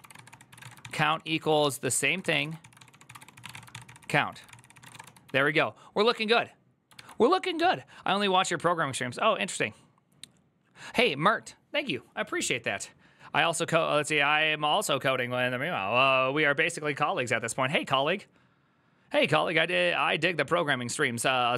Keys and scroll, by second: 0.0-5.3 typing.